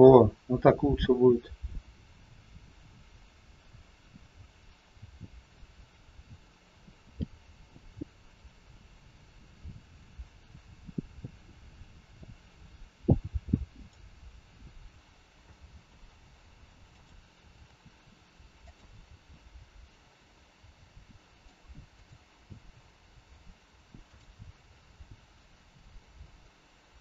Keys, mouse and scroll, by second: 13.7 click, 15.4 g, 18.6 r, 21.3 g, 21.9 click, 22.5 g, 26.9 click.